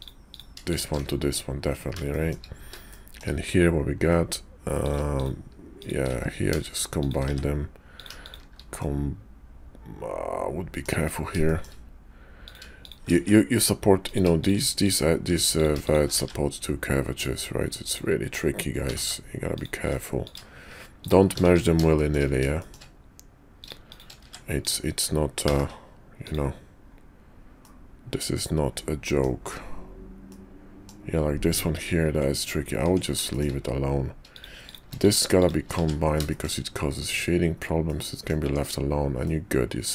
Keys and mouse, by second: 0.6 shift+click, 0.9 1, 2.1 shift+click, 2.9 shift+click, 4.7 click, 6.0 1, 7.2 1, 7.8 click, 8.2 shift+click, 8.8-10.8 drag, 11.4 shift+click, 13.1 shift+1, 14.9 shift+click, 17.7 click, 18.8 g, 20.2 click, 20.9 shift+click, 21.4 shift+1, 21.9 shift+click, 22.6 shift+click, 24.3 shift+1, 25.4 g, 27.6-29.2 middle drag, 30.2 middle click, 32.1 Tab, 32.8 Tab, 33.3 shift+click, 34.3 shift+click, 34.5 shift+click, 35.7 shift+1, 36.2 shift+click, 37.9 click, 38.4 Tab, 39.2 click.